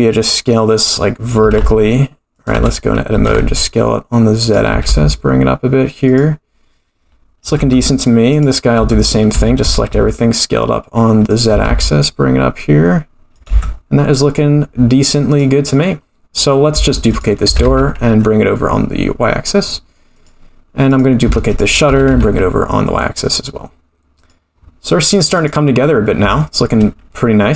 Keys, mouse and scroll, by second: 0.2 click, 0.8 click, 1.4 s, 2.5 Tab, 3.1 s, 4.7 g, 7.6 Tab, 8.3 click, 8.8 Tab, 9.3 a, 9.6 s, 11.5 g, 13.5 Tab, 15.3 click, 16.3-16.6 scroll up 1, 17.0 shift+d, 17.4 g, 20.8 click, 21.4 shift+d, 21.8 g, 25.4 click, 26.4 shift+middle click, 27.4-27.5 scroll down 1.